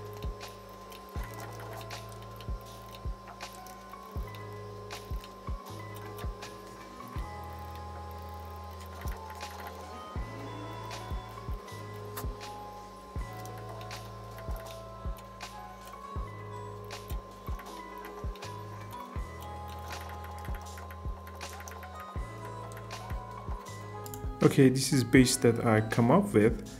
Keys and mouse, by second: 1.9 click, 3.6 f, 4.9 click, 5.9 click, 7.6 click, 10.8 click, 11.5 click, 13.5 shift+middle click, 14.3 shift+middle click, 20.2 click, 22.4 shift+middle click, 22.7 ctrl+middle click, 24.1-25.8 drag.